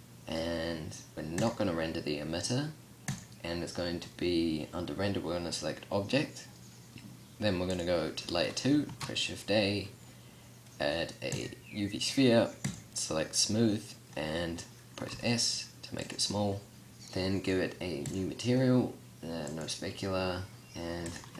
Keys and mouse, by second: 3.1-5.0 drag, 7.7-8.9 drag, 8.9 shift+a, 12.7-15.1 drag, 15.1 s, 16.1-16.9 drag.